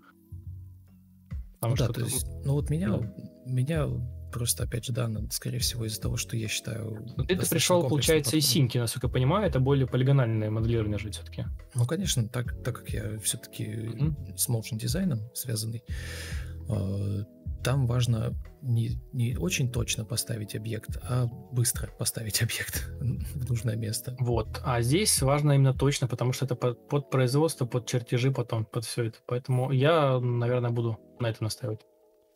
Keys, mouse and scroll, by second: 1.4 Escape, 4.8 Escape, 6.8 Escape, 7.9 Delete, 9.0 ctrl+e, 11.3 Delete, 11.6 Delete, 12.4 Delete.